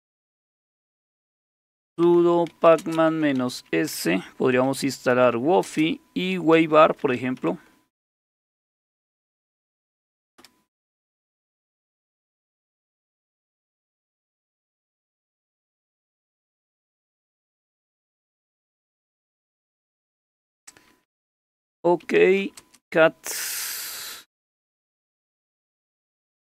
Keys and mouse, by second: 0.0-9.1 typing, 10.4 typing, 21.8-25.4 typing.